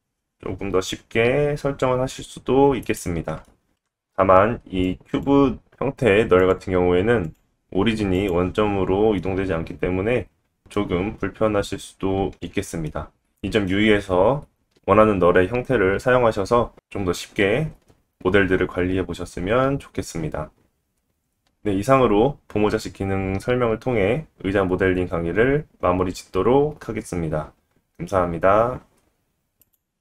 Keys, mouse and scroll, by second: 3.3 KP_1, 3.3 g, 3.4 middle click, 3.9-17.1 drag, 3.9 g, 9.2 middle click, 12.3-12.7 scroll up 2, 14.1 middle click, 16.5-17.1 scroll down 1, 19.7 click, 21.0-30.0 middle drag.